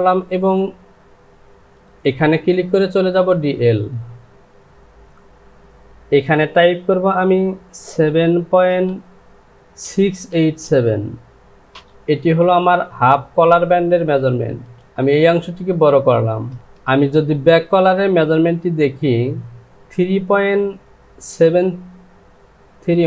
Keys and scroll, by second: 9.8 KP_6, 10.3 KP_8, 11.7 Return, 14.8 Return, 16.9 j.